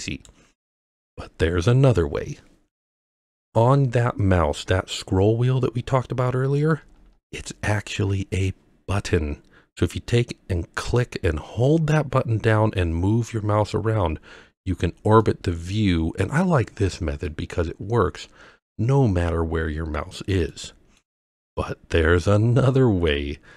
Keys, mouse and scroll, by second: 5.8 scroll up 3, 6.1 scroll down 3, 6.3 scroll up 2, 6.5 scroll down 2, 6.6 scroll up 1, 6.7 scroll down 1, 6.8 scroll up 2, 7.0 scroll down 1, 7.1 scroll up 1, 7.3-8.0 scroll down 1, 11.7-14.6 middle drag, 15.2-16.5 middle drag, 17.3-20.0 middle drag, 20.5-21.0 middle drag, 22.0-23.1 middle drag.